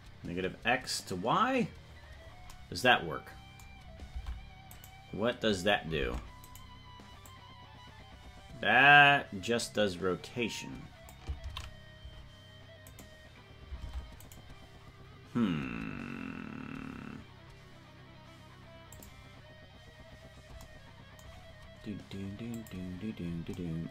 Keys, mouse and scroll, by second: 4.1 ctrl+Tab, 4.8 right click, 6.0 ctrl+Tab, 6.5 right click, 7.2-11.1 drag, 12.3 ctrl+z, 13.8 ctrl+Tab, 14.3 right click, 18.9 click, 22.5 click.